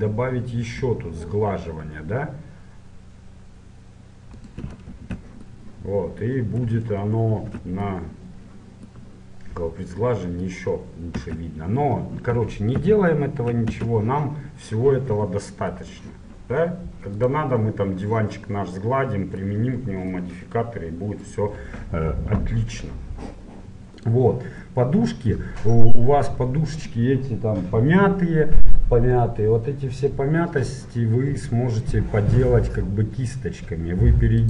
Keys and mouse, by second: 5.0 Tab, 5.6 click, 7.4 ctrl+1, 9.0 middle click, 9.7-10.8 middle drag, 11.3 Tab, 12.4 ctrl+z, 12.8 ctrl+z, 13.8 Tab, 17.3-19.1 drag, 24.0-25.8 drag, 25.8 middle click, 26.1-30.9 middle drag, 31.9-33.8 drag.